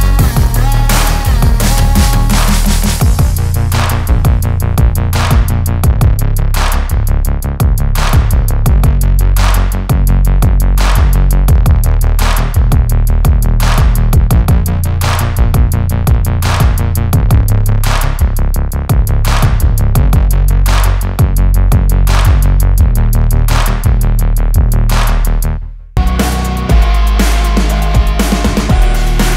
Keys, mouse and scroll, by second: 1.3-23.8 drag, 23.9 click, 25.2 ctrl+alt+shift+e, 26.7 alt+scroll up 1, 27.6 typing.